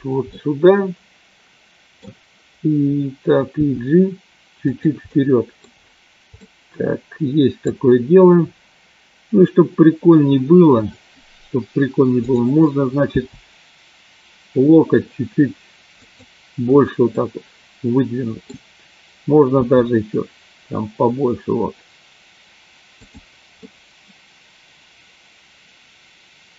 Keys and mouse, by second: 0.3-1.9 middle drag, 3.8 g, 5.1 middle click, 6.4-7.7 middle drag, 13.4 g, 17.1-18.4 middle drag, 19.4 g, 23.6-26.5 middle drag.